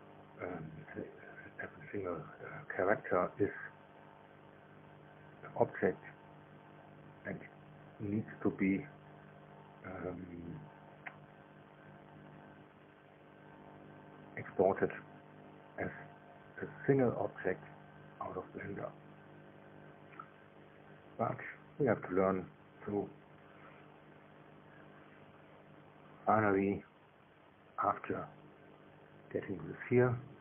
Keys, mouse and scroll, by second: 2.3 click, 3.4 click, 4.3 click, 5.4 BackSpace, 6.0 KP_Subtract, 6.4 KP_5, 6.6 KP_0, 8.5 Down, 9.6 Left, 10.9 KP_Subtract, 11.8 KP_5, 12.0 KP_0, 13.2 Delete, 13.4 Delete, 14.3 Return, 15.7-17.2 drag, 17.9 shift+middle click, 18.7-19.7 shift+middle drag, 21.3-22.5 middle drag, 23.3 KP_1, 26.2 shift+middle click, 27.2-29.1 scroll up 1, 29.1-30.4 drag.